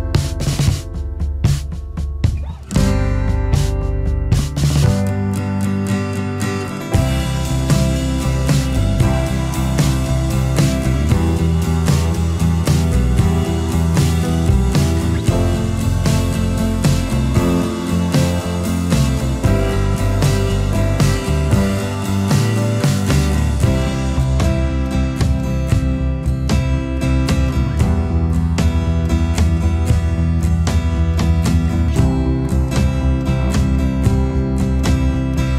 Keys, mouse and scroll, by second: 0.5 ctrl+8, 29.3 alt+scroll down 1, 29.6 space.